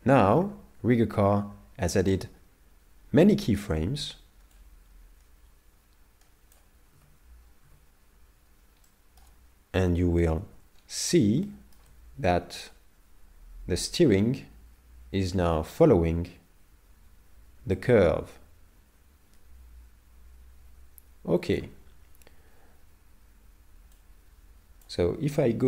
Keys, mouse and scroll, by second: 4.6 click, 7.0 z, 8.9 middle click, 9.9 KP_7, 10.8-11.2 scroll down 5, 11.5 shift+middle click, 12.7 click, 24.0 click, 24.4 click.